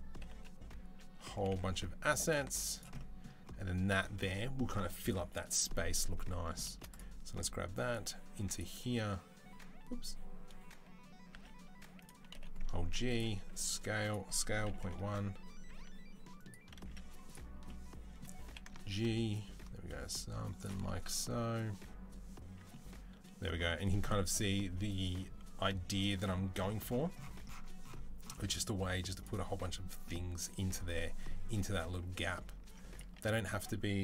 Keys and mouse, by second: 2.3 z, 6.5 shift+drag, 6.6 middle click, 6.7 drag, 6.8-7.6 middle drag, 7.6 click, 8.5-12.2 middle drag, 11.1 s, 12.2 g, 13.3 s, 14.1 s, 15.5 s, 16.6 s, 18.3-29.0 ctrl+middle drag, 18.3 g, 29.0 click, 29.1-31.8 middle drag, 31.8-34.0 drag.